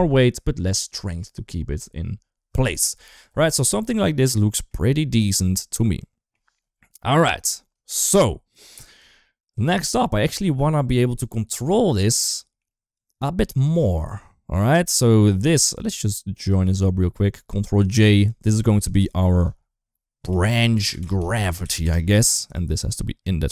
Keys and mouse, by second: 4.3 shift+middle drag, 5.2-6.1 middle drag, 6.7 KP_1, 7.7 shift+middle drag, 9.2 middle click, 10.3-10.7 shift+middle drag, 12.2 shift+middle click, 12.7 click, 13.9 click, 15.4 click, 16.7-17.3 drag, 17.7 ctrl+j, 18.0 click, 18.4 click, 18.8 F2, 21.7 typing, 22.3 drag, 22.8 click.